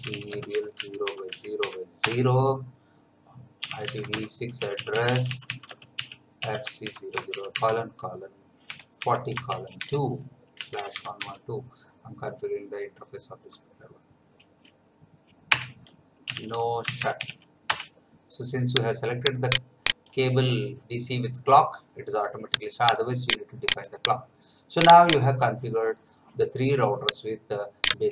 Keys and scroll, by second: 0.0-2.1 typing, 3.3-7.3 typing, 8.7-11.7 typing, 15.5 Return, 16.0-17.7 typing.